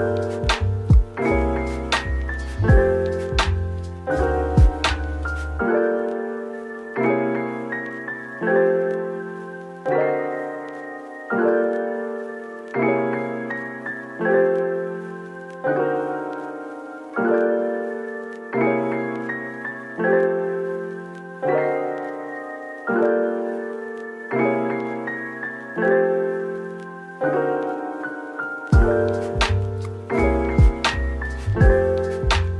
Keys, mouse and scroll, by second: 2.8 typing, 3.7 scroll up 1, 4.0 Tab, 4.6 typing, 5.5 middle click, 7.0 /, 7.3 middle click, 7.3 /, 7.7 shift+click, 8.5 shift+click, 8.7 shift+middle click, 8.7 click, 9.1 shift+click, 9.7 shift+click, 9.7 ctrl+b, 10.6-11.6 scroll up 1, 12.3 Tab, 12.9 right click, 14.0-15.4 typing, 17.6-17.9 scroll, 17.9 scroll down 1, 18.2-19.8 typing, 18.6 scroll down 1, 19.4-20.1 scroll down 1, 22.8-23.5 typing.